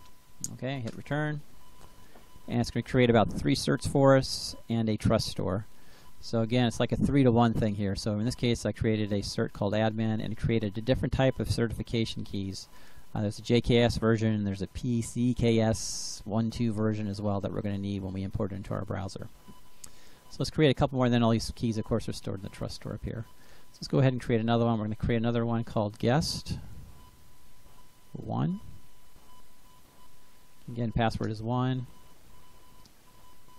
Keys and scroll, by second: 0.8 Return, 1.5 Return, 24.0 Up, 24.3 Left, 26.1-28.2 typing, 29.0 Delete, 31.1 Return, 31.8 Return.